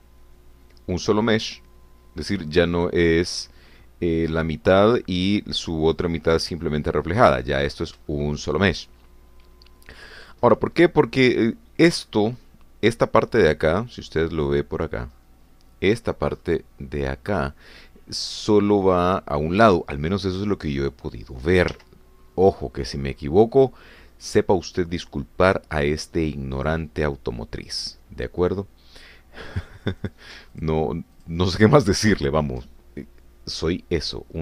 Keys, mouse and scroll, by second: 6.9 scroll down 2, 7.3-8.4 drag, 8.6-9.0 scroll up 3, 9.1 shift+middle click, 14.5-15.2 scroll down 4, 15.5-16.1 scroll down 2, 16.1-19.2 scroll up 2, 19.2 scroll up 1, 20.1 scroll up 2, 20.8 shift+middle click, 21.5 shift+middle click, 27.7 click, 31.2 click, 31.5 shift+click, 32.2 shift+click, 32.7 shift+click.